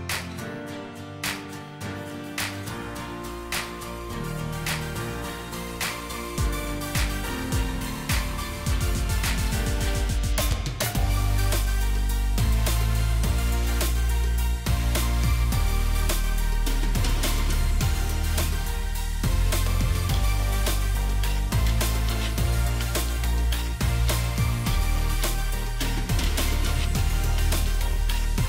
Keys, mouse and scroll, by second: 0.2 shift+click, 7.3 ctrl+g, 12.5 right click, 13.6 double click, 15.7 Up, 17.7-18.1 alt+scroll up 1, 20.1 shift+click, 21.1 shift+click.